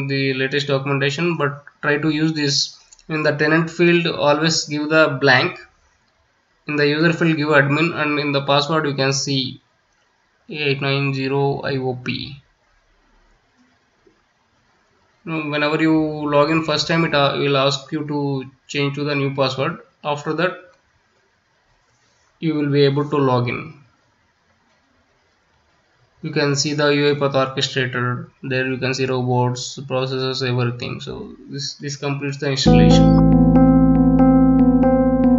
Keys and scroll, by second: 1.0 space, 2.1-6.2 typing, 7.7 space, 8.7 space, 9.5 space, 11.2 space, 12.2 space, 15.0 space, 15.8 space.